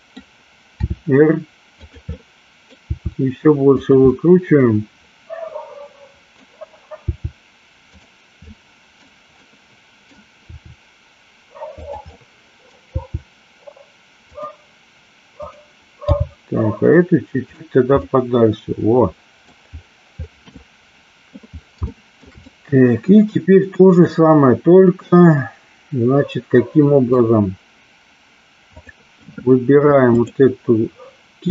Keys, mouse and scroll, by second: 1.0 r, 2.2 middle click, 2.8 r, 4.2-6.5 middle drag, 7.1 r, 7.9 click, 8.6-9.0 middle drag, 9.6-10.1 middle drag, 10.5 r, 11.9 click, 12.2-12.9 middle drag, 13.0 r, 14.3 click, 15.4 click, 16.2 g, 18.1-19.5 middle drag, 20.6-21.3 middle drag, 21.8-22.4 shift+middle drag, 22.6-27.1 middle drag, 28.8 click, 30.2 click.